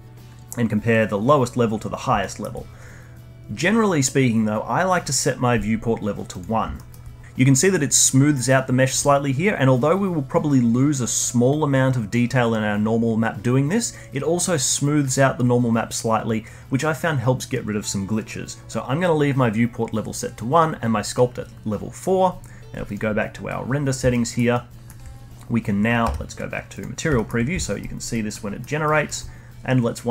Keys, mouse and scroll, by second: 6.3 click, 6.7-7.2 alt+middle drag, 22.8 click, 23.6-24.1 scroll down 3, 24.1-26.0 alt+middle drag, 26.0 z, 27.1-27.8 alt+middle drag, 27.8 alt+right click, 28.3 alt+middle click, 28.8-30.1 alt+right drag.